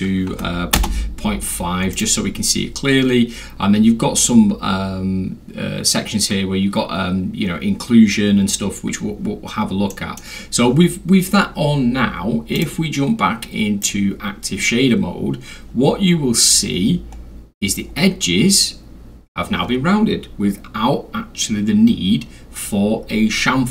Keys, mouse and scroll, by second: 0.3 5, 0.7 Return, 1.9 click, 9.9 middle drag, 12.6 click, 13.8 click, 17.3 scroll down 2, 17.9 scroll down 2, 19.6 scroll.